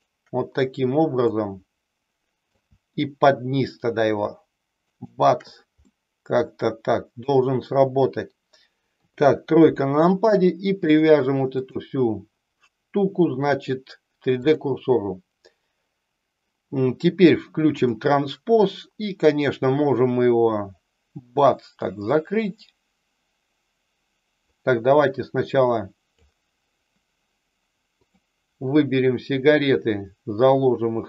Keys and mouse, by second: 1.2-2.4 middle drag, 5.8-7.1 middle drag, 9.0 KP_3, 11.6-14.4 drag, 17.7 click, 19.9-26.2 drag, 27.9 click, 29.4-31.0 drag.